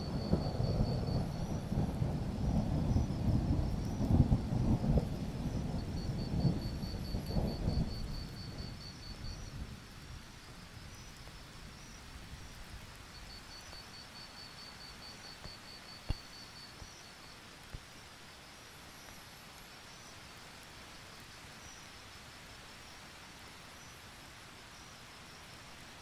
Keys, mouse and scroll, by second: 1.5 alt+scroll down 1, 1.7 click, 3.0-3.5 alt+scroll up 1, 3.5 click, 3.7 alt+scroll up 1, 4.1-6.6 drag, 7.6-8.6 scroll down 1, 8.6 click, 14.3 alt+click, 15.0 click, 17.2 alt+click, 18.0 click, 18.4-21.9 alt+drag, 22.0 alt+scroll up 1, 22.2 click, 23.5-23.8 ctrl+scroll up 1, 23.8 click.